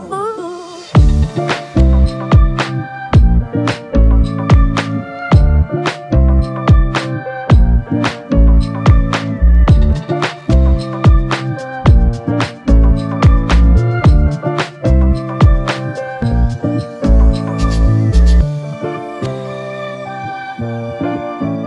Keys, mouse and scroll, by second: 0.2 double click, 2.4 shift+click, 8.0 shift+click, 12.0 double click, 21.0 double click.